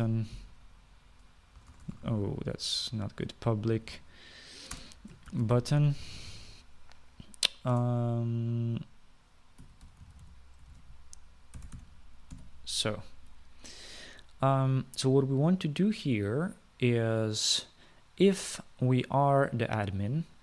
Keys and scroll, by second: 0.0-1.6 typing, 2.7 BackSpace, 2.8 BackSpace, 3.3 BackSpace, 4.6-7.8 typing, 8.9 space, 10.5-13.5 typing.